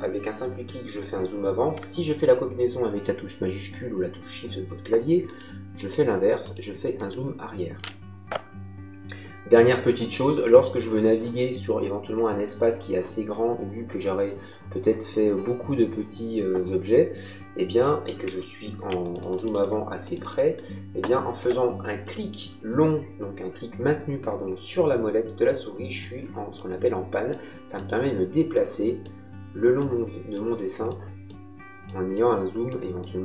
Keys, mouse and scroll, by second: 5.2 middle click, 18.9 middle click, 19.3 right click, 19.5 middle click, 22.0 middle click, 26.5 middle click, 27.7 middle click, 28.9 middle click, 30.3 middle click.